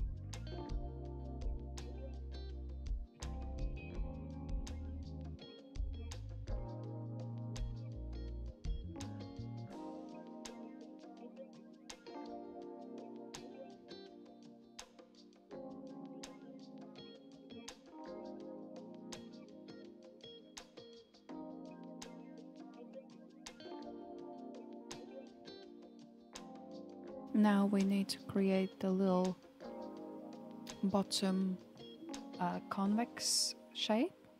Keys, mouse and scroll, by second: 2.8-3.7 scroll up 5, 3.7-5.2 shift+middle drag, 5.2-5.9 scroll up 1, 5.9 click, 6.8 Tab, 8.6 alt+click, 9.5 alt+click, 10.9 g, 13.7 alt+z, 14.4 alt+z, 15.3 Tab, 15.7-16.7 scroll down 7, 16.7-19.3 shift+middle drag, 19.3-20.4 scroll up 3, 20.4 KP_1, 21.2-22.9 scroll down 6, 22.9 scroll up 2, 23.5 scroll up 1, 27.5-28.0 scroll down 1, 28.0-29.4 middle drag, 29.4 Tab, 30.0-30.6 shift+middle drag, 30.6-31.5 scroll up 3, 31.5 alt+click.